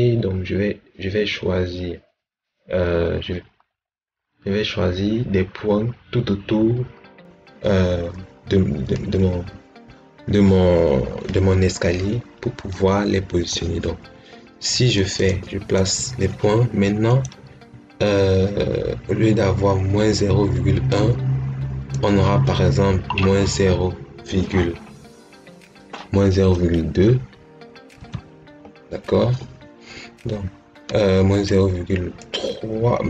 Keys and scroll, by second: 27.9 2.